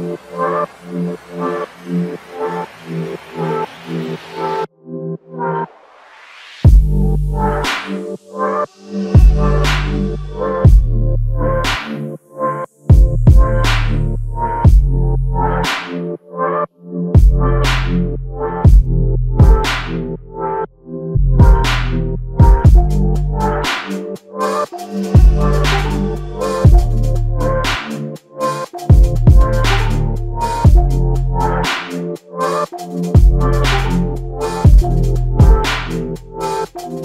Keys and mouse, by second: 5.9 alt+shift+click, 7.9 alt+l, 8.1 ctrl+alt+click, 10.1 f, 15.7 double click, 17.4 ctrl+alt+click, 18.8 alt+click, 21.6 shift+click, 24.0 alt+click, 24.8 shift+click, 26.2 alt+click, 27.2 ctrl+alt+click, 36.4 shift+click.